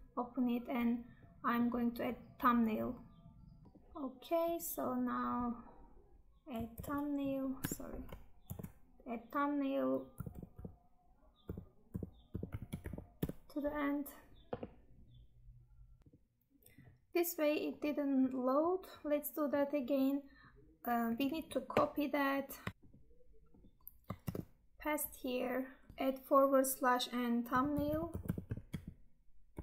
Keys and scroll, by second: 6.8 ctrl+alt+7, 24.2 ctrl+v.